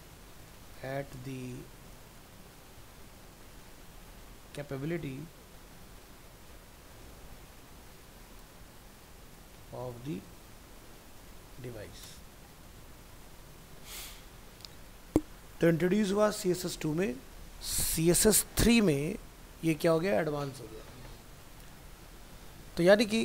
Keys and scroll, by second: 12.6 ctrl+s.